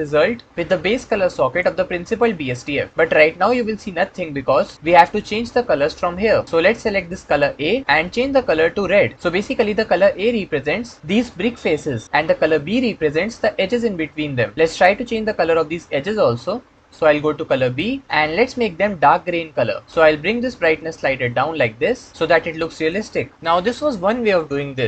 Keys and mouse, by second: 0.6-1.6 drag, 5.3 middle click, 7.1 click, 17.6 click.